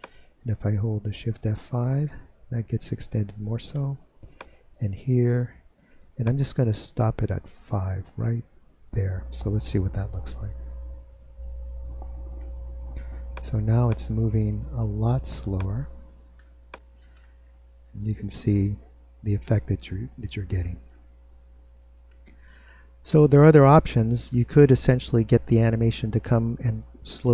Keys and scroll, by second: 0.2 F5, 6.7 F5, 8.1 F5, 11.1 super+Return.